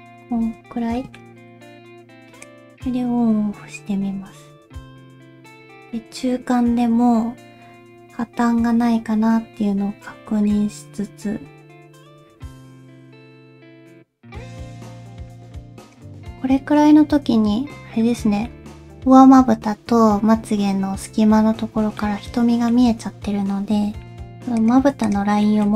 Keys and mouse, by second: 0.4 Tab, 1.0 middle click, 2.5-16.0 drag, 22.0 ctrl+middle click.